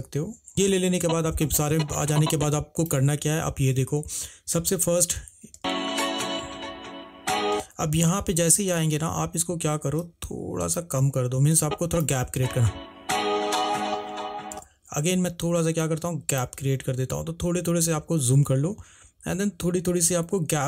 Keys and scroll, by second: 0.5 -, 5.7 space, 12.6 space.